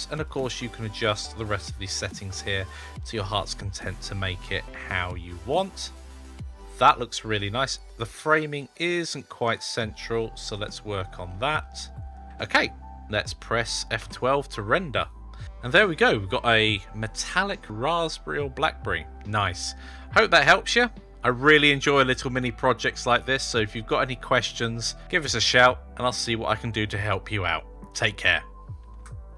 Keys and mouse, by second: 0.1-1.9 shift+drag, 2.4-4.5 shift+drag, 7.7 shift+`, 13.9 F12.